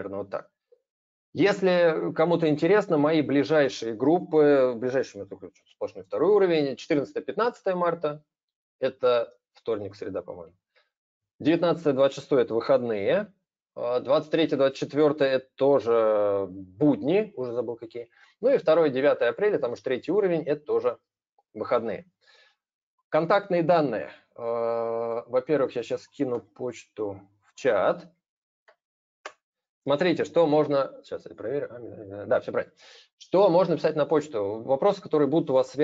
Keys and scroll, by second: 26.1 ctrl+c, 28.5 ctrl+v.